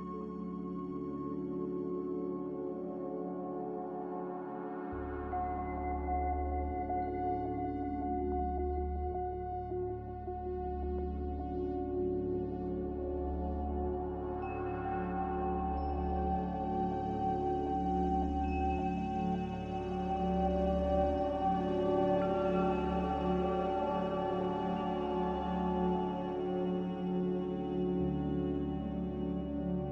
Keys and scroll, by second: 0.1-1.0 typing, 4.5-5.2 typing, 15.9-16.8 typing.